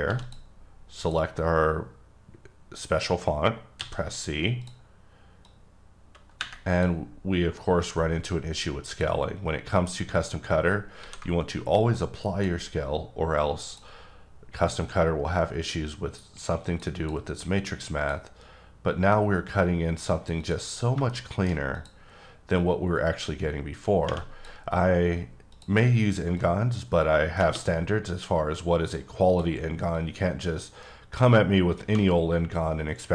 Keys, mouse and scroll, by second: 0.0 g, 0.2 click, 1.0 click, 3.8 click, 4.6 click, 5.4 click, 8.9 click, 11.0 ctrl+a, 12.2 click, 13.7 click, 16.9 double click, 18.0 click, 18.9 click, 20.4 double click, 21.1 shift+middle click, 21.7 click, 22.5 click, 25.5 click, 26.4 click, 29.3 click, 29.9 click.